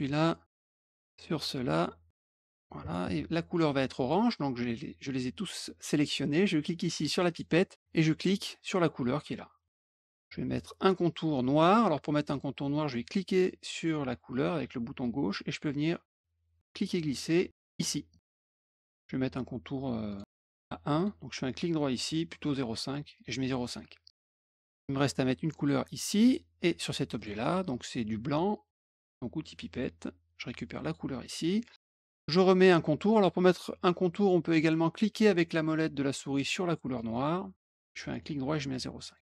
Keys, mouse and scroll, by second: 0.7 shift+click, 1.1 shift+click, 1.7 shift+click, 2.3 shift+click, 2.8 shift+click, 7.2 click, 9.1 click, 13.2-17.7 drag, 20.0 right click, 20.9 click, 21.9 right click, 23.1 click, 24.5 click, 25.5 click, 27.1 shift+click, 29.7 click, 30.8 click, 36.9 middle click, 38.0 right click, 39.0 click.